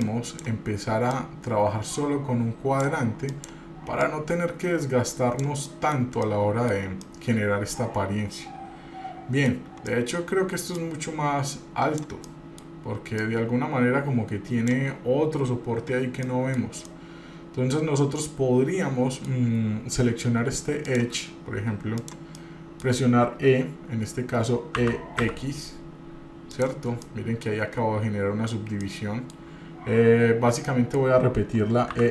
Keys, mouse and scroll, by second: 0.2 click, 1.3-3.0 drag, 3.5 click, 4.2-5.6 drag, 5.8 middle click, 6.2 scroll down 3, 6.3 scroll up 1, 6.4 middle click, 7.0-10.0 middle drag, 7.0 scroll up 1, 10.1 click, 10.9-12.2 drag, 12.5 middle click, 13.4-14.9 drag, 16.4 middle click, 17.1-19.5 middle drag, 21.1 click, 22.2 click, 22.6 middle click, 25.0 e, 27.2 middle click, 28.8 middle click, 28.8 scroll up 2, 30.9 middle click.